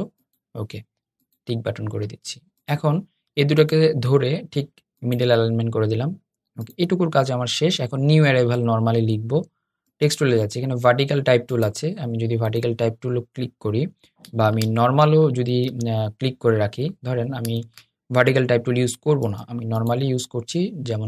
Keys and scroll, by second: 14.2 super+z, 15.4 super+z, 16.5 Escape, 17.4 super+z.